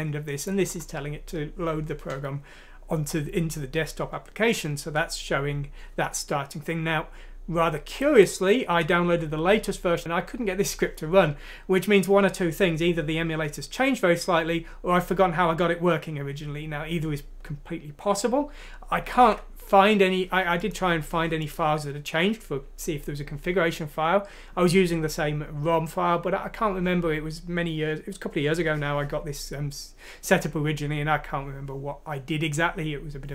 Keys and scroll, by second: 19.2 alt+Tab.